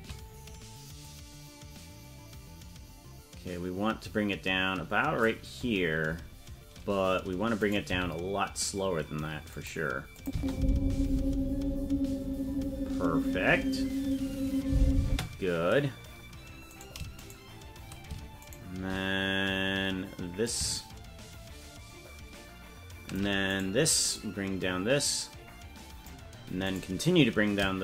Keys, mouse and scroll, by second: 1.0-5.3 drag, 6.6-7.6 scroll down 5, 7.6 right click, 7.9 g, 10.1 click, 10.3 space, 15.0 space, 15.6-16.4 scroll down 3, 17.3 shift+right click, 20.4-23.2 shift+drag, 23.6 right click, 24.1-26.1 drag, 26.8 right click.